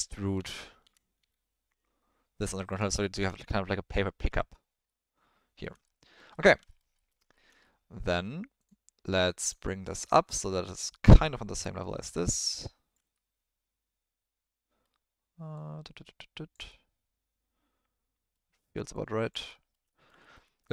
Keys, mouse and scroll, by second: 3.2 Tab, 4.8-5.6 ctrl+drag, 5.8 click, 5.9 middle drag, 6.3 ctrl+middle drag, 6.9 alt+middle click, 7.3 shift+middle drag, 7.6-8.0 middle drag, 9.4 click, 10.8-12.9 drag, 13.2-14.8 middle drag, 15.8 click, 16.8-18.4 middle drag, 19.1 click, 19.6 middle click, 20.0 ctrl+middle drag, 20.3 middle click.